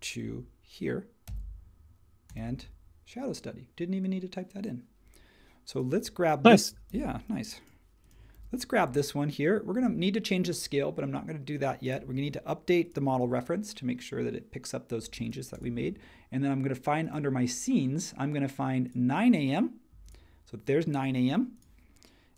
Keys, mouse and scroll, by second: 1.2 super+v, 6.9 super+c, 8.3 super+v.